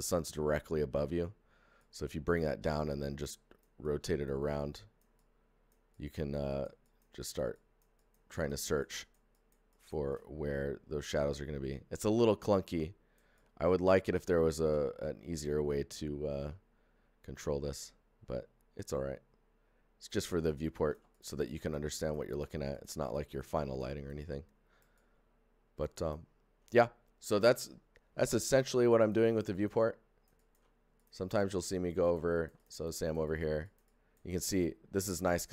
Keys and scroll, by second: 31.0 shift+f.